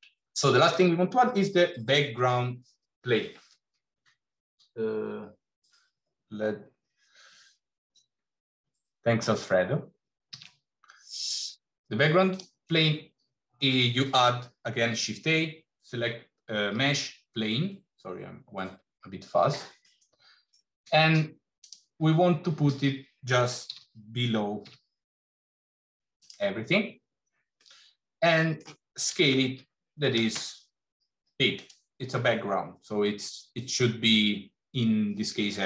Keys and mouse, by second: 0.1 middle click, 10.2 shift+a, 19.8 middle click, 21.5 click, 23.5 g, 27.4-28.5 middle drag, 29.0 s.